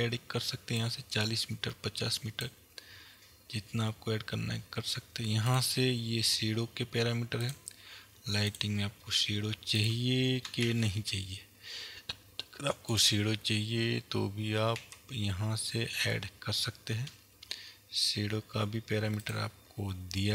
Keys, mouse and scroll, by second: 0.8-5.8 drag, 6.0-7.2 scroll down 1, 8.0 click, 9.1 click, 9.9 click, 10.8 shift+a, 15.0 s.